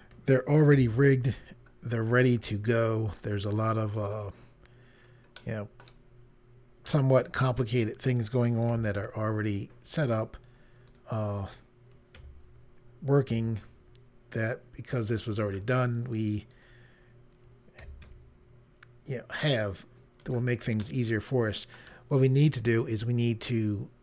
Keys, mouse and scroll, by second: 0.7 g, 3.9 right click, 5.3 middle click, 7.1 click, 8.6 g, 9.9 right click, 10.8 click, 12.1 r, 13.2 x, 15.3 right click, 16.4 click, 17.7-18.1 typing, 20.1 right click, 20.7 middle click.